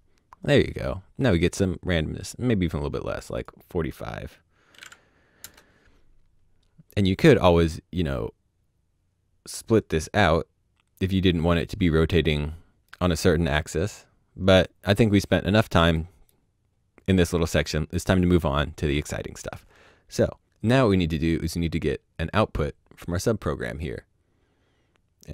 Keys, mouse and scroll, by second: 2.5 click, 4.7 KP_4, 4.7 KP_5, 5.4 KP_Enter, 11.6 KP_Enter, 14.1 middle click, 15.3 middle click, 22.2 click.